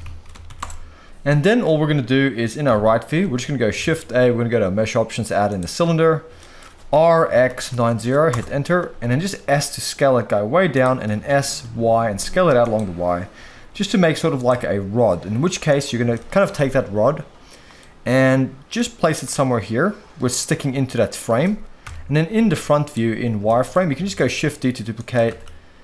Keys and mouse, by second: 2.9 KP_3, 3.8 shift+a, 6.4 shift+middle drag, 6.9 r, 7.2 x, 7.4 9, 7.6 0, 8.3 Return, 9.4 s, 10.7 click, 11.1 s, 11.6 y, 13.6 s, 14.5 g, 15.6 click, 16.1-16.4 shift+middle drag, 16.5-17.8 middle drag, 18.8-20.6 middle drag, 21.8 KP_1, 22.4 z, 23.5 shift+middle drag, 24.0 shift+d, 24.9 click, 25.3 shift+d.